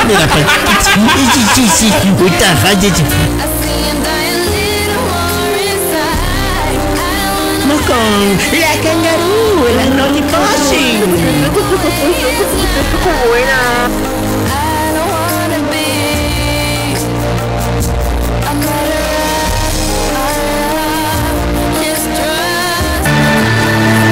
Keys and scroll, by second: 3.8 Page_Down, 14.6 Page_Down.